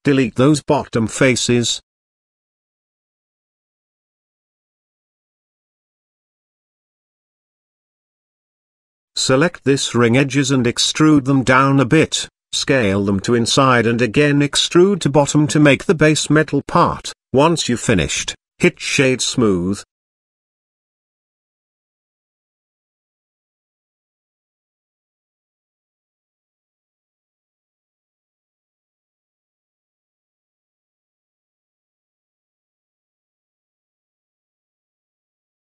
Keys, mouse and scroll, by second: 1.4 KP_1, 1.5 click, 2.5 x, 4.7 click, 5.6 click, 5.8 middle click, 6.5 alt+click, 7.2 middle click, 8.0 shift+middle click, 9.2 e, 10.5 s, 11.9 e, 16.1 s, 18.3 e, 21.1 middle click, 21.4 shift+middle click, 22.4 s, 23.4 e, 24.6 s, 27.2 Tab, 27.9 middle click, 28.5 z, 28.9 middle click, 29.5-29.8 shift+middle drag, 30.6-31.4 right drag, 31.4-32.0 middle drag, 32.5-33.5 shift+middle drag, 33.7 Tab, 34.8 click, 35.6 KP_3.